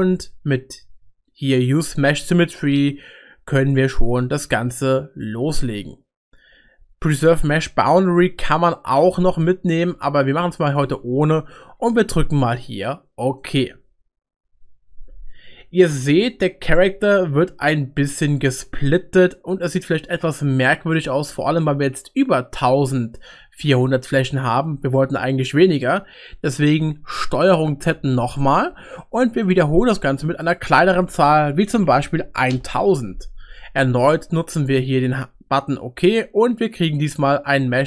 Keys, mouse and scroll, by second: 16.8-21.0 middle drag, 25.6 middle click, 28.0 ctrl+z, 29.4-37.2 drag, 32.1 0.